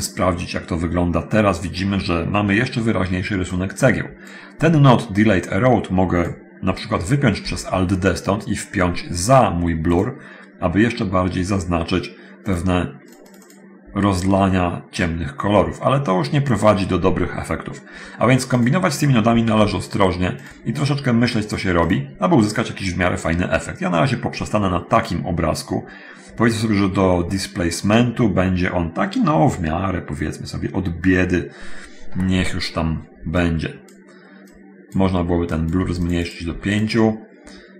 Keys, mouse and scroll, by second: 3.7 click, 5.4-6.6 drag, 7.4 alt+d, 12.7 click, 13.2 click, 18.8 click, 19.6 alt+d, 21.6 click, 22.0 click, 33.6-34.1 drag, 34.6 click, 35.6 click, 35.6 5, 36.2 click, 36.7 5, 37.0 click.